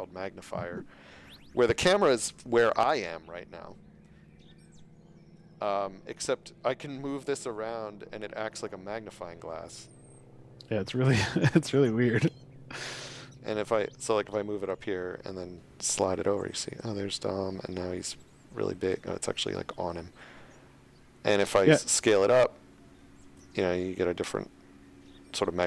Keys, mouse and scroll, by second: 2.6 click, 3.8-4.2 shift+scroll, 13.3 scroll up 1, 14.7 scroll up 1, 18.8-19.3 scroll down 2, 21.3-23.2 scroll.